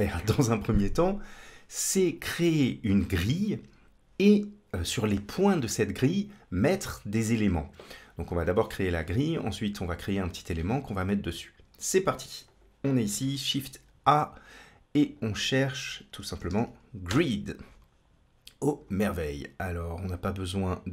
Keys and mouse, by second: 12.3 click, 13.2 shift+a.